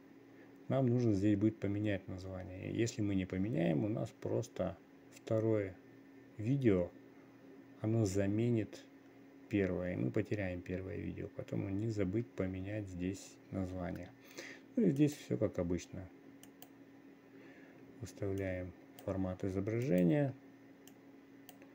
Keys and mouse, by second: 15.5-17.2 drag, 18.9 click, 20.3 click, 21.6 click.